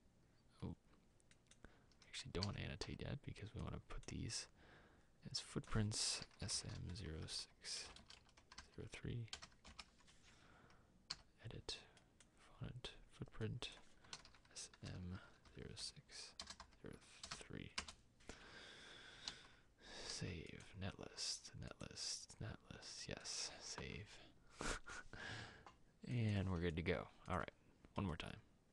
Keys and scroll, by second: 9.7 Return, 9.7 typing, 12.7 e, 17.9 typing, 19.3 ctrl+s.